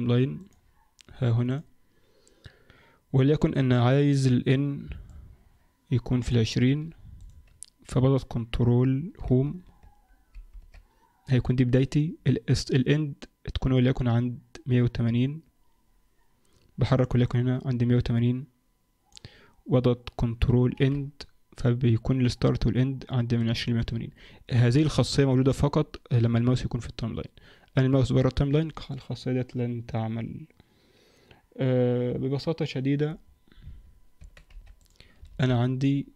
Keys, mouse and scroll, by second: 1.5 click, 5.1 click, 7.1 click, 10.7 ctrl+Home, 17.2 click, 20.7 ctrl+End, 33.3-34.1 scroll down 2, 34.1 Tab, 34.1-34.5 scroll down 2, 34.5 x, 35.3 shift+a.